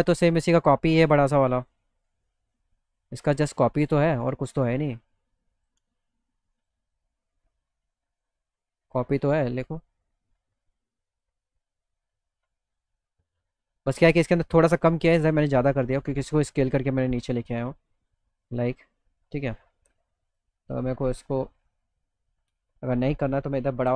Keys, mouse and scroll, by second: 0.4 click, 1.5 middle click, 1.8 middle click, 3.9-5.7 shift+drag, 6.6 click, 7.3 click, 8.2-12.3 drag, 12.5 click, 20.3 click.